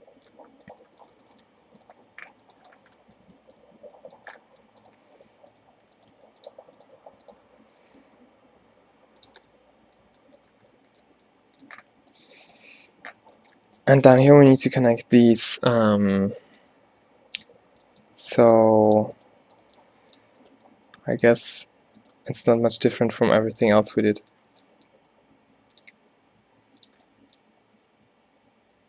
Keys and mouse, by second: 0.9 f, 1.4 shift+f, 2.1 f, 3.5 Tab, 4.3 Tab, 5.8 alt+w, 6.2 g, 7.5 alt+w, 8.1 g, 9.4 Tab, 11.1 a, 11.3 a, 11.9 a, 13.2 right click, 13.3 Tab, 13.4 click, 17.0-23.0 typing, 17.5 middle click, 24.9 g, 26.0 e, 27.1 click, 28.2 e.